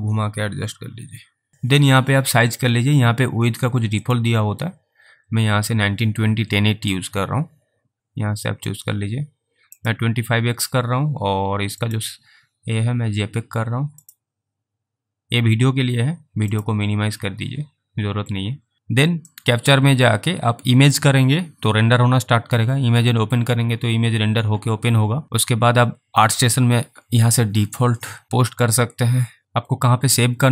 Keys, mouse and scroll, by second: 4.3 click, 8.0 click, 29.4 click.